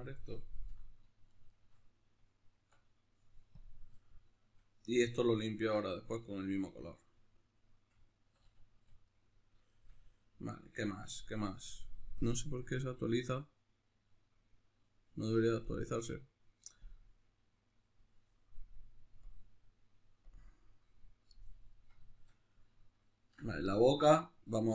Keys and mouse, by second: 1.3-2.7 shift+right drag, 2.7 Tab, 3.7 click, 4.0-16.9 middle drag, 8.3 a, 16.9 click, 21.7-24.7 middle drag.